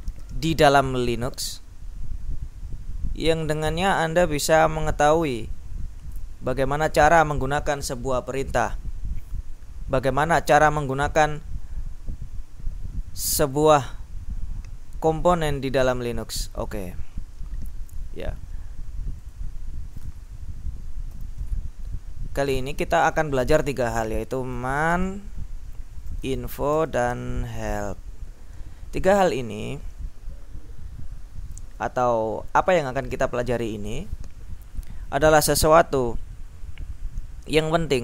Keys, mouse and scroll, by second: 13.6 click, 15.7 click, 16.9 click, 19.5 click, 21.2 ctrl+shift+m, 22.6-23.8 drag, 24.4-28.2 typing.